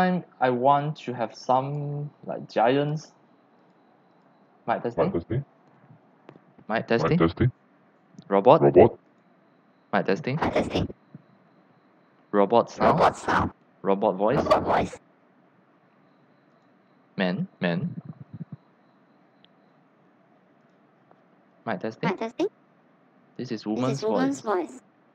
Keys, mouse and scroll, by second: 2.9 click, 3.6 click, 4.1 click, 9.1 click, 9.8 drag, 11.2 click, 16.5 click, 20.6 click, 24.8 click.